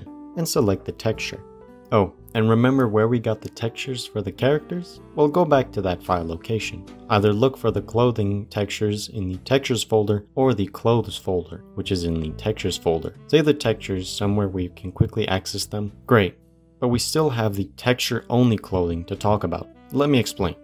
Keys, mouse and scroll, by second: 0.1 click, 15.9 click.